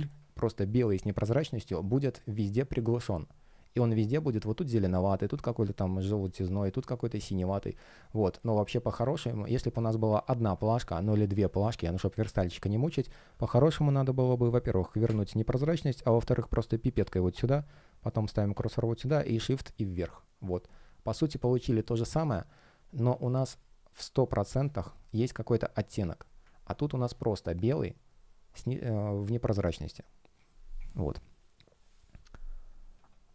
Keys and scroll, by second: 2.1 space, 7.4 space, 10.6 space.